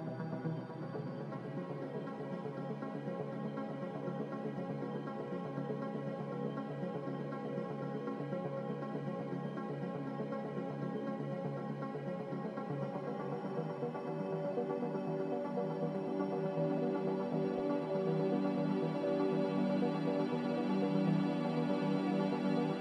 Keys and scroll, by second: 14.0 a, 15.2-16.1 typing, 19.3-20.2 typing.